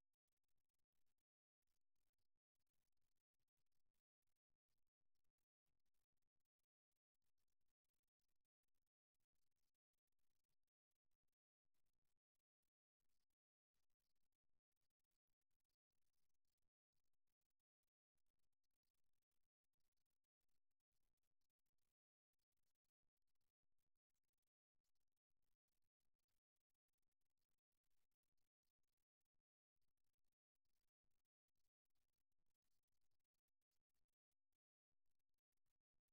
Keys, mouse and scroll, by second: 4.2 e, 11.0-12.8 right drag, 15.8-20.4 middle drag, 20.4 ctrl+r, 27.0 e, 35.6 e.